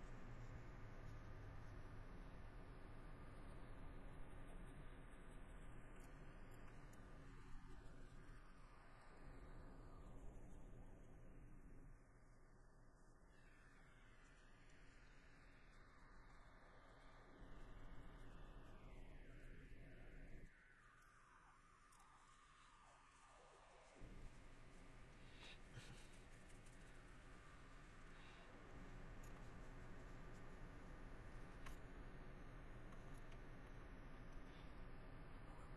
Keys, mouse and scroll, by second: 0.5 middle click, 1.2 middle click, 1.8 middle click, 2.3 middle click, 2.8 middle click, 4.8 middle click, 5.7 middle click, 6.0 scroll, 6.1 middle click, 6.5-7.1 scroll, 6.7 shift+middle click, 7.1 middle click, 8.7 middle click, 9.4 middle click, 10.9 middle click, 12.7 middle click, 14.4 middle click, 15.0 middle click, 16.4 middle click, 18.3 middle click, 19.0 middle click, 20.5 middle click, 21.1 middle click, 21.9 scroll, 22.1 middle click, 23.3 middle click, 24.0 middle click, 28.1 middle click, 28.7 middle click, 30.5 middle click, 31.1 middle click, 31.8 middle click, 32.3 middle click, 33.5 middle click.